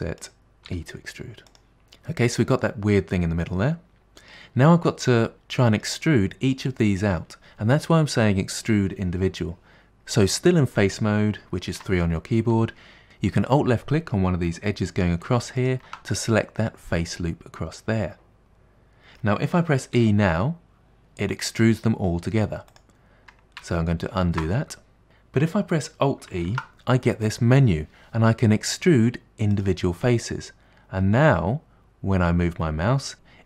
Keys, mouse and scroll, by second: 0.8 e, 1.7 shift+middle click, 1.8-2.6 scroll down 3, 2.6-4.4 middle drag, 4.4-5.3 scroll up 1, 5.3-5.8 scroll down 2, 5.8-8.8 shift+middle drag, 11.9 3, 15.7 alt+click, 16.4-19.4 middle drag, 20.0 e, 24.3 ctrl+z, 26.5 alt+e.